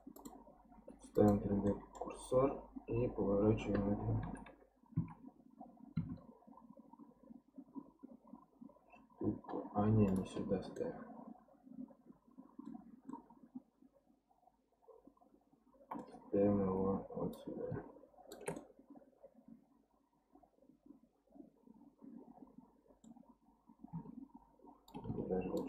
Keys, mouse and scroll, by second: 0.1-1.7 drag, 1.7 middle click, 2.1-4.2 scroll down 1, 4.2 r, 10.8-16.1 middle drag, 17.3-18.6 shift+right drag, 18.6-21.7 middle drag, 24.9-25.6 shift+right drag.